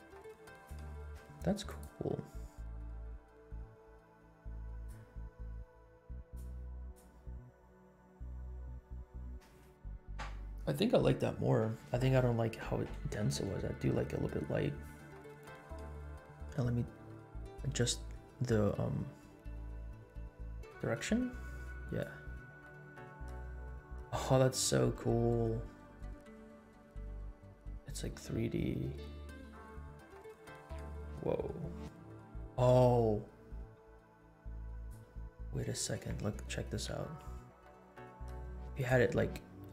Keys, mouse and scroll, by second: 0.0 space, 0.5-0.9 drag, 1.6 click, 4.7 click, 6.3-6.7 drag, 6.9 drag, 8.9 scroll down 2, 12.0-12.7 scroll up 4, 13.1 space, 13.7 scroll down 1, 14.8 scroll down 2, 15.7 space, 17.5-18.4 scroll down 3, 18.5 scroll up 2, 19.7 click, 21.9-35.0 drag, 36.9 r, 39.5 scroll down 2.